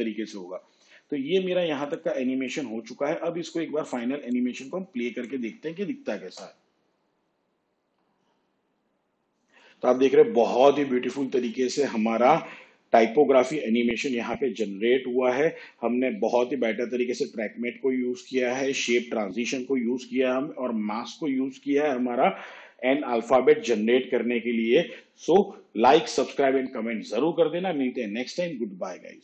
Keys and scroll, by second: 6.6 space.